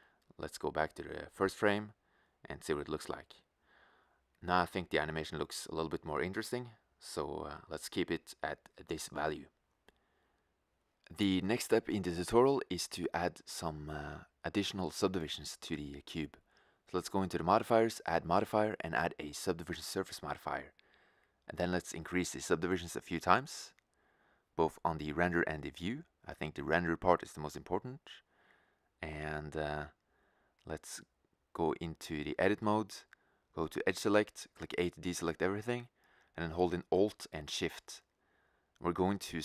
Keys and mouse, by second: 0.5-3.5 drag, 5.5-6.8 middle drag, 31.2 Tab, 34.0 a, 36.9-39.4 right drag.